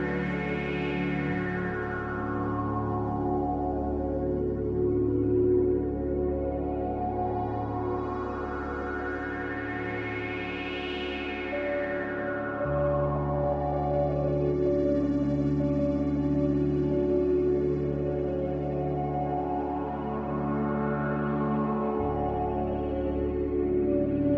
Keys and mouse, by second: 1.8-3.1 drag, 4.6 e, 14.7 s, 17.9 e.